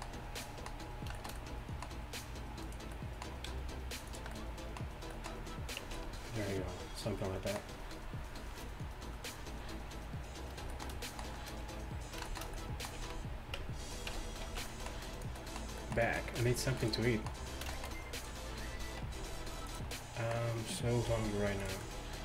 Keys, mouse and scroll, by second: 5.9 Tab, 5.9 g, 13.0 z, 14.2 Tab, 14.5 z, 16.4 g, 19.1 r, 19.7 click, 21.1 g.